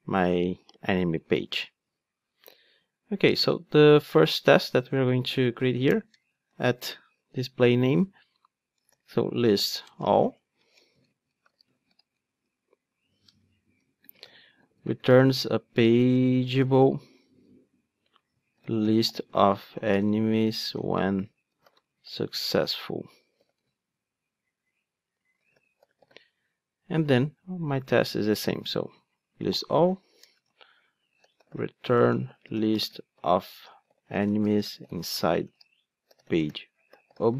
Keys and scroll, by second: 1.3 alt+super+l, 7.4 Return, 28.6 super+c, 29.4 super+v.